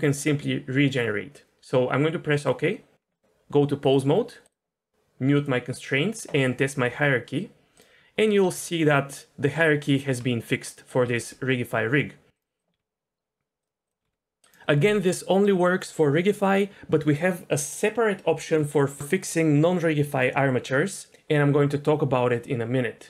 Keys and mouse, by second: 3.1 middle click, 4.0-4.5 drag, 5.3 click, 6.6 click, 6.9 r, 8.4 r, 9.9 click, 10.1 r, 11.0 r, 12.7 r, 14.0 r.